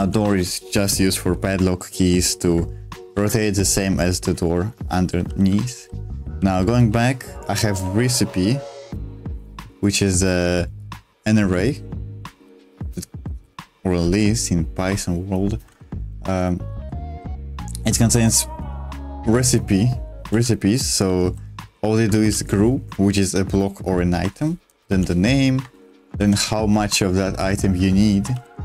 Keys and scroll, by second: 0.0-0.4 typing, 3.1 Escape, 4.7-7.7 typing, 12.5-14.3 typing, 16.7 j, 17.0 j, 18.6 h, 18.7 h, 20.0-21.0 typing, 22.1 shift+v, 24.2 Escape, 24.4-26.2 typing, 25.6 Escape, 27.6 Escape, 28.3-28.6 typing.